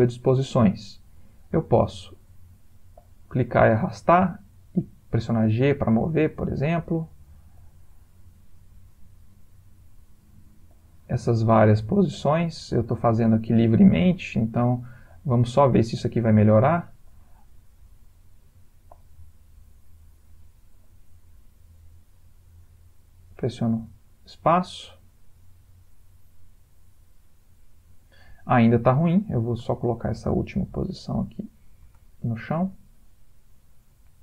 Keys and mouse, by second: 1.6 click, 3.0 click, 5.3 g, 7.5 click, 8.7 g, 10.7 click, 11.6 g, 12.7 click, 13.8 g, 15.1 click, 15.9 g, 17.1 click, 17.8 g, 18.9 click, 19.6 g, 20.7 click, 21.4 g, 23.1 click, 23.9 space, 27.9 Escape, 29.1 click, 30.2 shift+d, 32.5 space.